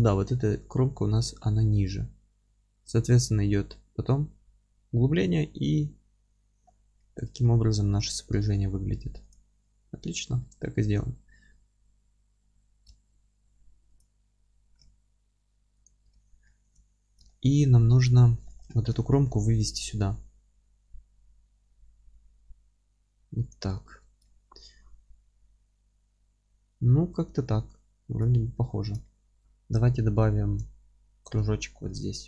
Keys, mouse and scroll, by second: 0.0-2.7 scroll up 2, 2.7-5.9 scroll up 1, 5.9 middle click, 5.9-6.4 scroll down 2, 6.6-7.0 scroll down 2, 7.4-9.3 alt+middle drag, 8.0-8.4 scroll up 1, 9.3 click, 9.6-14.0 middle drag, 10.0 alt+q, 11.5-11.9 scroll up 1, 12.9 Tab, 14.0 click, 14.7 g, 15.9 click, 16.1 alt+q, 16.5-18.0 alt+middle drag, 16.8 z, 17.6-18.0 scroll up 1, 18.0 click, 18.4-23.5 middle drag, 18.7 scroll up 1, 20.6 g, 23.5 click, 23.7 scroll down 1, 23.9 Tab, 24.2-32.2 alt+middle drag, 28.3-29.1 scroll down 1, 30.0-30.3 scroll up 1.